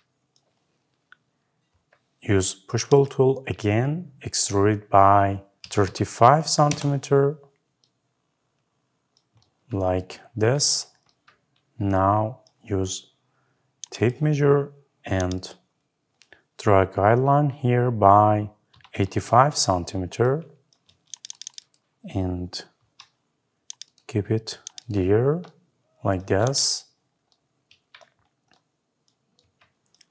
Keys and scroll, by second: 6.5 Return, 19.1 Return.